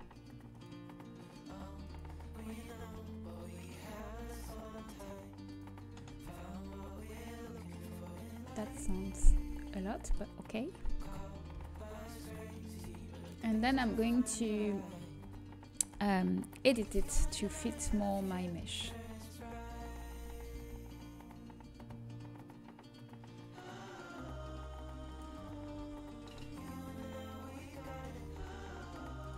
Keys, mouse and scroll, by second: 3.6 Tab, 5.4 click, 6.3 Tab, 7.4 middle click, 11.5 KP_7, 15.2 z, 15.9 a, 18.0 b, 20.6 g, 25.4-27.9 middle drag, 27.9 a, 28.2 g.